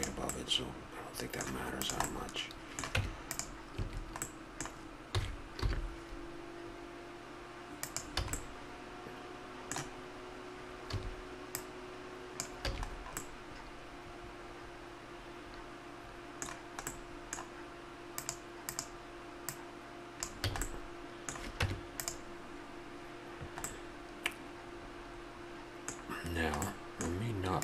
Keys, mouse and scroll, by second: 0.3-0.9 middle drag, 1.8-2.9 right drag, 2.9 Tab, 3.7 a, 5.1 s, 8.2 a, 10.2 middle click, 10.8 a, 11.6 click, 12.7 a, 13.2-15.4 middle drag, 16.9-18.7 middle drag, 18.1-20.6 drag, 20.4 a, 20.6 middle click, 21.6 Tab, 25.5-26.5 middle drag.